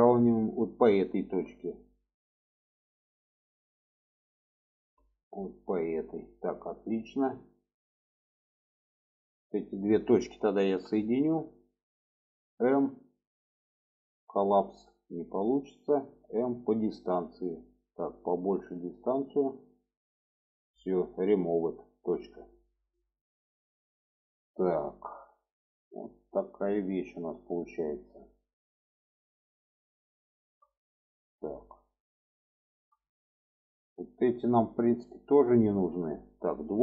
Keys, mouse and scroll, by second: 0.9 shift+middle click, 2.8-5.7 ctrl+drag, 6.4 middle click, 7.4 middle click, 7.9 middle click, 8.5 middle click, 9.6 middle click, 10.5 1, 11.6 click, 12.7 m, 18.3-20.5 drag, 22.2 click, 22.8 middle click, 23.5-25.2 middle drag, 25.7 middle click, 26.7 middle click, 27.4 middle click, 28.0-29.8 middle drag, 30.1 shift+middle click, 31.0 shift+middle click, 31.6 shift+middle drag, 32.4 shift+middle click, 33.3 middle click, 34.3 shift+middle click, 36.5 2.